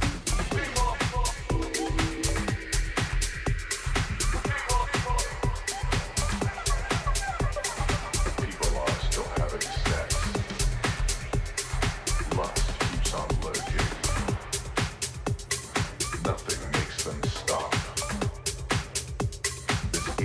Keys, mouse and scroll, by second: 1.3-3.5 middle drag, 5.4 s, 12.2-14.5 middle drag, 20.0 KP_3.